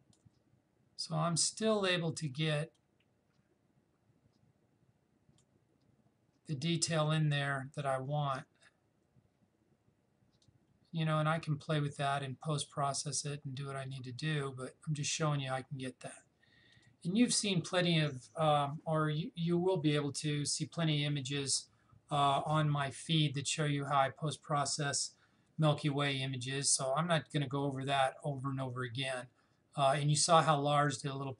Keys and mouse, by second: 2.8-7.9 drag, 10.4-16.5 drag, 16.7 click.